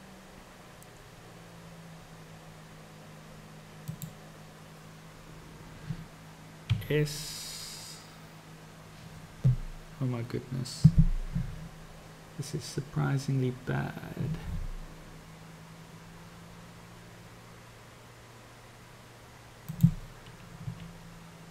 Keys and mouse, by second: 6.7 s.